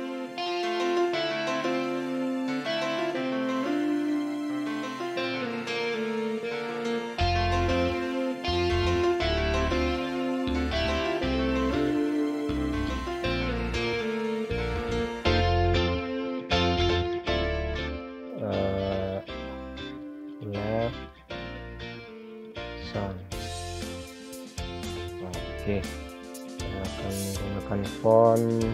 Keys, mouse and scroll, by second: 1.2 click, 1.8-2.1 scroll down 1, 2.1-2.5 scroll up 1, 2.5 click, 18.0-20.6 typing, 21.7-22.5 typing, 25.1 click.